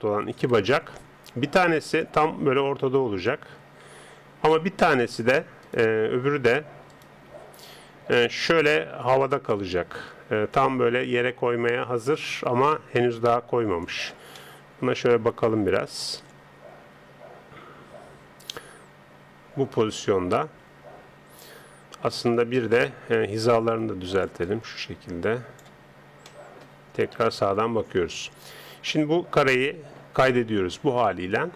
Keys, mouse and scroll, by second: 0.4 KP_3, 2.0 click, 5.6-8.7 right drag, 8.1 g, 14.4-16.8 middle drag, 22.6 KP_1, 24.3 click, 26.3 middle click, 27.1 KP_3, 28.9-30.7 middle drag.